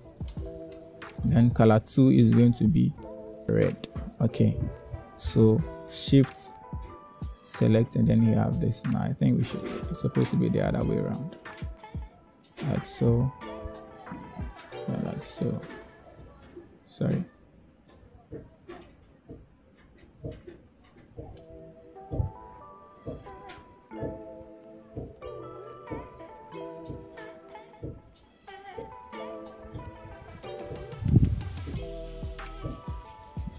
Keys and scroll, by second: 18.2 f, 18.5 Return, 33.0 f.